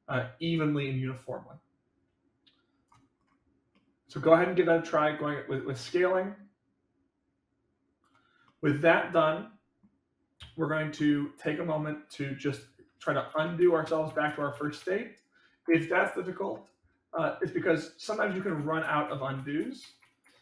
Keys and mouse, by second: 3.7-4.4 middle drag, 5.2-8.0 drag, 8.4-9.8 middle drag, 11.0-11.8 middle drag, 13.3 ctrl+z, 13.5 ctrl+z, 18.5 ctrl+z, 18.8-20.4 ctrl+z.